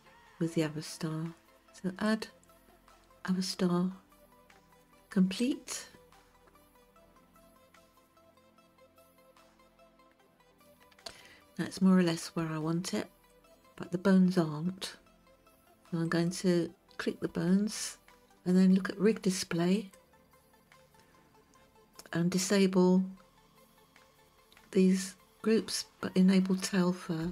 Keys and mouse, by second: 2.1-8.5 drag, 11.2-12.2 shift+middle drag, 13.4 click, 16.1 click, 19.8 click.